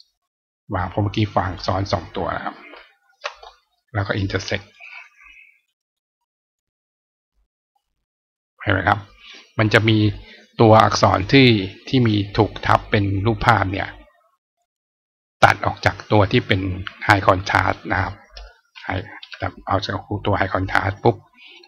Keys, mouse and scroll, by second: 1.2 right click, 2.9 shift+click, 4.0 click, 4.5 click, 5.5 click, 6.4-7.5 drag, 9.6 click, 11.1 click, 14.4 click, 17.8 click, 20.8 click.